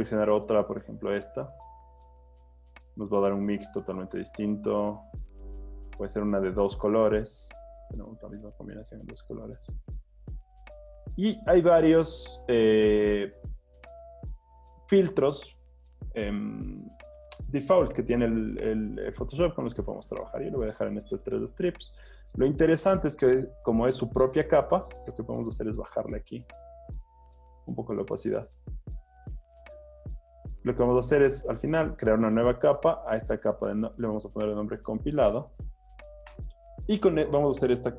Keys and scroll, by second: 34.3-35.9 typing.